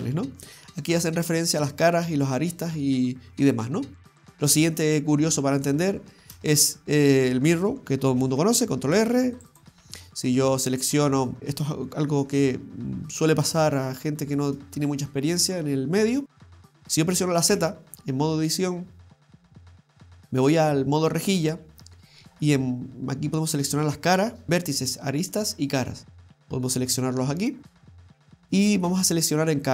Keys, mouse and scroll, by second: 4.2 middle click, 4.2-5.0 scroll down 1, 5.0 scroll down 1, 9.0 ctrl+r, 10.4 middle click, 12.1 KP_7, 17.5 z.